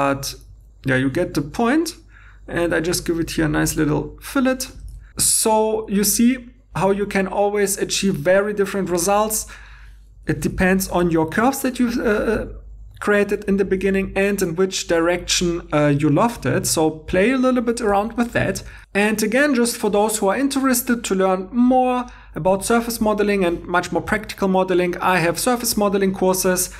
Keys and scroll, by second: 0.5 2, 4.8 shift+e, 18.7 alt+Tab.